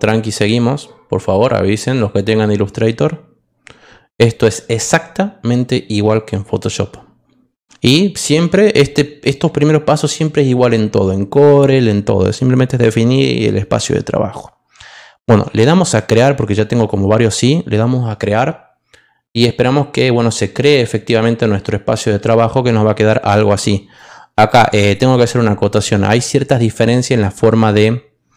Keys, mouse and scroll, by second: 15.9 click, 23.9 click.